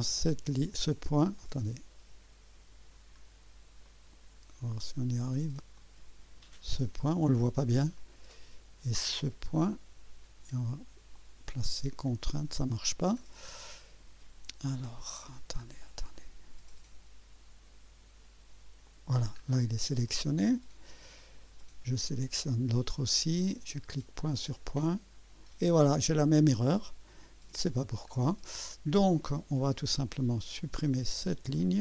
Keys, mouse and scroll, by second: 0.5 click, 1.4 click, 3.2 scroll up 1, 3.9 right click, 5.8 click, 8.0 right click, 9.6 click, 11.1 click, 12.5 click, 13.3 scroll down 1, 13.7-14.2 right drag, 15.6 scroll up 1, 16.2 right click, 16.4 right click, 16.7 scroll up 1, 18.9 click, 19.4 scroll down 2, 20.1 right click, 21.6 right click, 24.7 click, 27.1 click, 28.1 scroll down 2, 29.2 right click, 31.5 click.